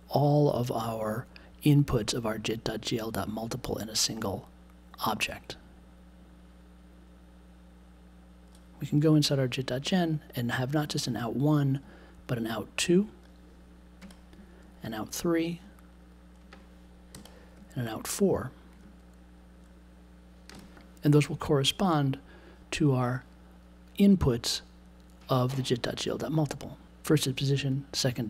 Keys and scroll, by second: 14.0 2, 17.1 3, 20.5 4.